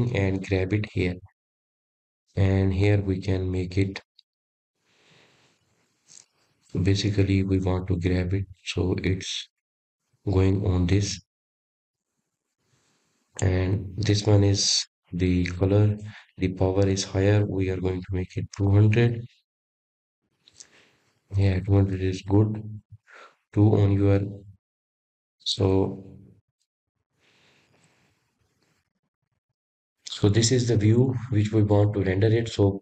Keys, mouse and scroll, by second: 1.1 click, 2.8 click, 5.6 scroll up 1, 6.3-10.8 middle drag, 10.8 click, 13.2-16.6 middle drag, 16.6-19.8 drag, 22.0 KP_0, 23.6 click, 24.3 scroll up 3, 26.2 KP_0, 28.0-28.8 scroll down 1, 28.8 KP_0, 30.2-32.8 middle drag.